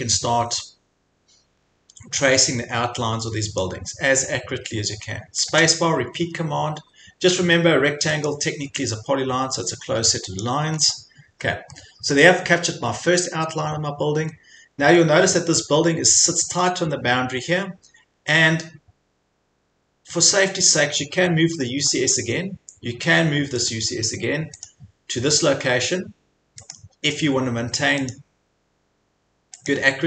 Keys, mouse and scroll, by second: 0.5 click, 0.8 scroll, 1.5-2.0 scroll, 3.6 click, 3.9-4.4 scroll, 4.8 scroll, 8.3 click, 9.1-10.7 drag, 10.8 scroll, 12.1-12.5 scroll, 13.1 scroll, 14.3 scroll, 14.9 scroll, 15.8 scroll, 18.0 scroll, 20.6 scroll, 21.9 scroll, 23.7 click, 24.7 click, 25.9 scroll, 26.7 click, 28.1 click, 29.7 click.